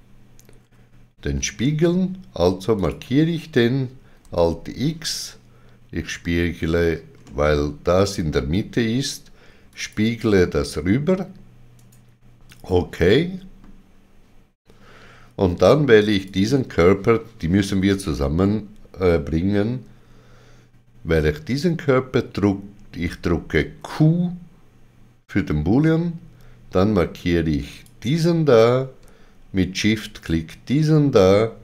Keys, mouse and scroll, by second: 0.6 KP_Divide, 2.7 click, 4.2 alt+x, 7.2 alt+x, 7.2 middle click, 7.2 click, 9.8 click, 11.8 middle click, 11.8 right click, 12.8 middle click, 16.1 click, 23.6 click, 23.6 middle click, 23.6 q, 27.7 click, 27.7 q, 30.1 shift+click.